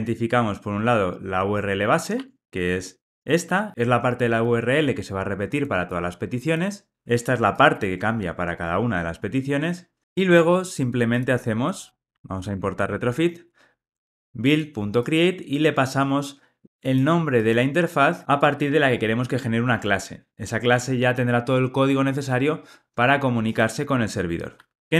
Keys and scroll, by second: 2.1 Tab, 12.4 alt+Return.